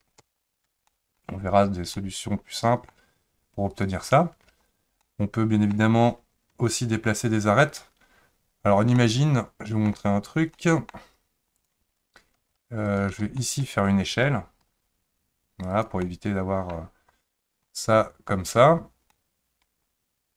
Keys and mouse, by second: 0.2 ctrl+z, 0.9 middle click, 1.9 middle click, 3.7 click, 4.7 shift+click, 5.0 middle click, 9.0 middle click, 10.5 middle click, 11.6 click, 12.9 shift+click, 13.4 middle click, 14.6 s, 16.0 middle click, 19.1-20.3 middle drag.